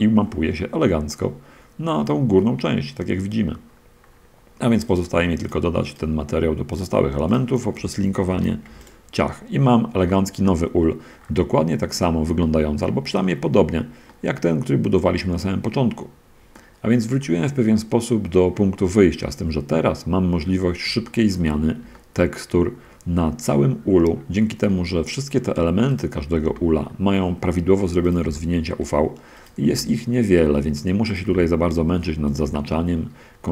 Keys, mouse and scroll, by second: 0.5-1.1 scroll up 1, 1.1-3.5 middle drag, 3.7-5.2 scroll down 3, 5.2 click, 6.2 shift+right click, 7.1 shift+right click, 7.3 shift+right click, 8.6 ctrl+l, 8.9 ctrl+click, 10.2 a, 10.7-11.7 middle drag, 12.1-12.5 scroll down 1, 12.7 shift+click, 13.3-14.3 shift+drag, 14.4-16.7 drag, 16.8-17.3 drag, 17.5-19.3 drag, 19.9-20.3 scroll down 2, 20.3 middle click, 21.3 shift+drag, 21.6 shift+middle click, 21.8-22.1 shift+scroll up 1, 22.1-23.2 shift+middle drag, 25.0 middle click, 26.3 right drag, 26.7 g, 27.7 Escape, 28.2 drag, 28.2 g, 29.0 Escape, 29.6 g, 30.7 Escape, 31.1 click, 31.1 g, 31.9 Escape, 33.2 Escape.